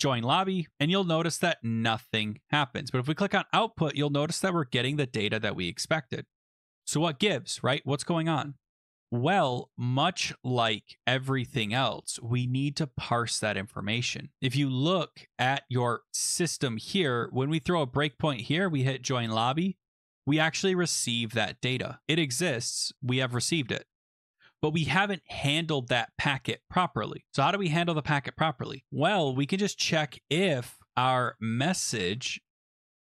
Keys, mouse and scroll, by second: 0.0 click, 0.7 click, 0.8 click, 1.0 click, 2.2 click, 3.0 click, 5.6 click, 6.6 click, 6.9 click, 7.3 click, 8.8-9.5 scroll, 9.6 click, 11.0-11.7 scroll, 11.7-12.7 scroll, 12.7-13.2 scroll, 13.9-15.3 scroll, 17.5 click, 18.1 click, 18.7 click, 19.2 click, 19.9 click, 20.1 click, 21.8 click, 26.9 click, 28.7 Return, 28.8 Return, 28.9-32.3 typing, 29.3-31.1 drag.